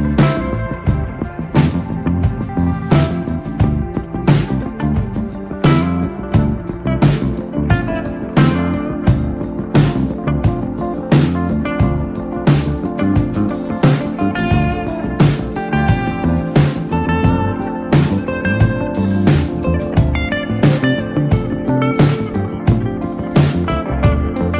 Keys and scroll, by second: 1.5 ctrl+space, 3.7 space, 4.8 ctrl+z, 5.1 space, 8.8 ctrl+space, 9.0-10.9 typing, 14.6 space, 14.8 r, 16.0 x, 17.2-19.4 typing, 20.7 e, 21.4 b, 21.7 space.